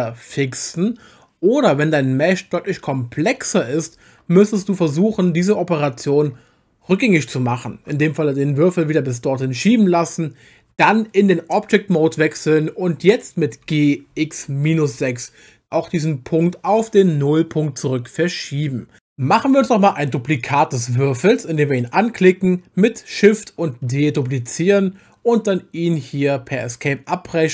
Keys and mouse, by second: 4.8 ctrl+z, 5.3 ctrl+z, 8.9 ctrl+z, 10.7 Tab, 13.6 g, 14.1 x, 14.7 -, 15.0 6, 16.3 Return, 21.8 click, 23.9 shift+d, 26.4 Escape.